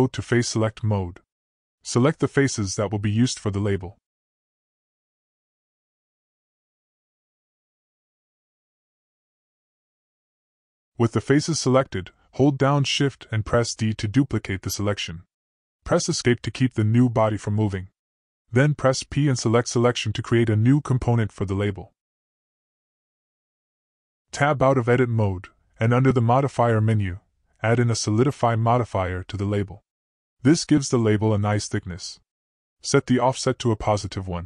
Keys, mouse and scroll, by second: 1.7 click, 4.2 click, 5.7 middle click, 6.0 click, 6.1-7.1 middle drag, 7.9 shift+click, 8.3 shift+click, 9.3 middle click, 9.8-11.7 drag, 13.2 shift+d, 16.7 p, 19.9-22.3 drag, 24.2 t, 24.2 middle click, 25.8 Escape, 26.6 Tab, 28.7 click, 29.6 click, 31.2-34.4 drag.